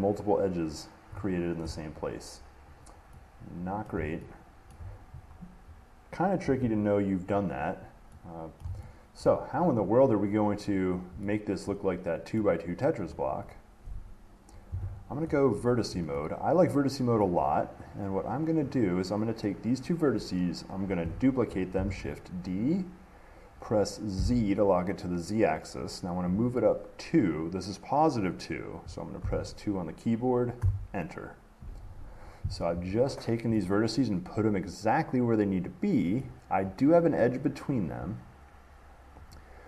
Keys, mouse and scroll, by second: 2.9-3.4 scroll down 3, 4.1 middle click, 4.9 shift+middle click, 7.6 middle click, 7.6 middle click, 8.3-8.7 scroll, 8.8 middle click, 9.5 middle click, 10.5 middle click, 10.5 middle click, 11.4 middle click, 12.6 middle click, 13.3 middle click, 13.4 middle click, 17.4 middle click, 18.8 click, 22.0-24.1 drag, 22.0 d, 24.4 z, 29.4 2, 30.8 Return, 36.4 middle click, 37.8 click, 38.4 middle click, 38.5 middle click, 39.5 click.